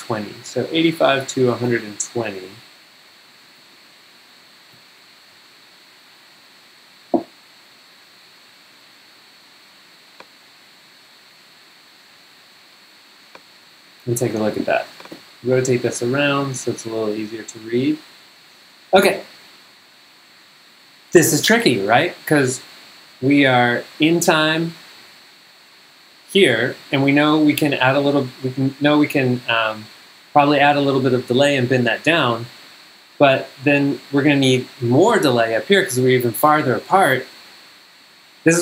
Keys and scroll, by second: 3.3 super+Down, 15.7 Up.